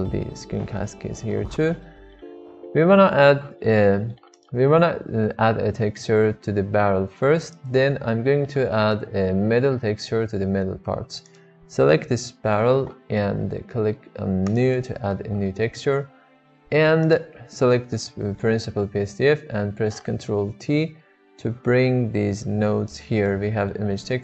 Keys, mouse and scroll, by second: 0.3 n, 1.3-1.6 middle drag, 2.0 shift+middle click, 2.2-2.8 middle drag, 3.6 shift+middle click, 3.8-4.1 middle drag, 7.4 drag, 14.4 click, 15.3 middle click, 16.5 middle click, 17.0 click, 18.1 middle click, 20.4 ctrl+t, 21.3 g, 23.4 click.